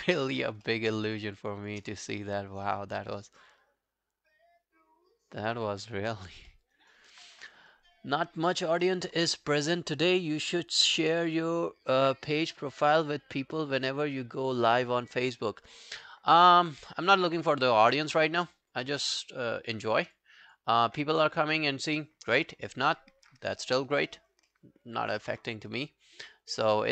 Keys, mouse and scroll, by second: 0.0 alt+right click, 0.2 alt+click, 0.7 alt+middle click, 1.1 shift+click, 1.3 shift+click, 1.9 shift+click, 1.9 alt+scroll down 1, 2.1 alt+click, 6.5 alt+middle click, 6.8 alt+right click, 20.5 double click, 24.5 alt+middle click, 24.9 alt+scroll down 1, 25.4 alt+middle click, 25.6 alt+right click, 25.9 alt+click, 26.3 alt+middle click, 26.6 alt+right click, 26.8 alt+click.